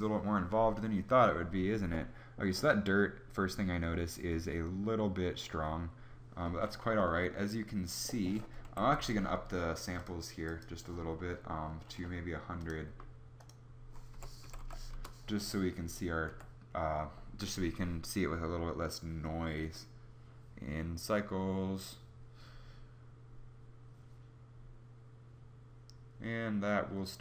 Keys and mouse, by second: 14.1 0, 15.8 F12.